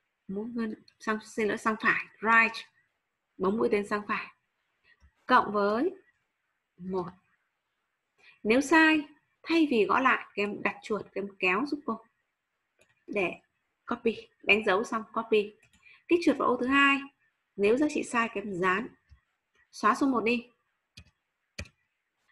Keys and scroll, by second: 5.3 shift+=, 13.9 ctrl+c, 18.5 ctrl+v.